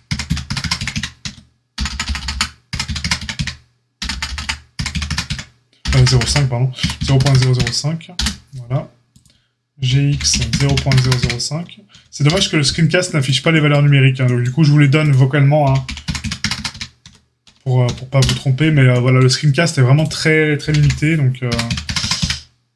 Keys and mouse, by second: 9.0 click, 9.1-14.9 middle drag, 10.0 g, 14.9 click, 15.0-22.7 middle drag, 15.6 g, 20.6 g.